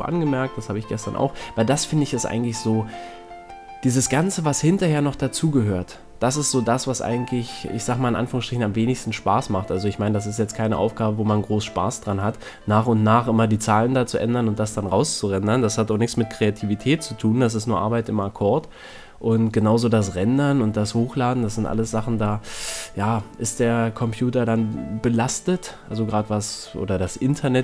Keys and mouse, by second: 2.7 middle click, 3.6-4.8 drag, 6.7-9.0 middle drag, 9.3 a, 9.6 c, 12.1 c, 14.3-16.3 middle drag, 17.7 middle click, 17.9 a, 18.6 z, 19.0-21.2 middle drag, 27.4-27.6 middle drag.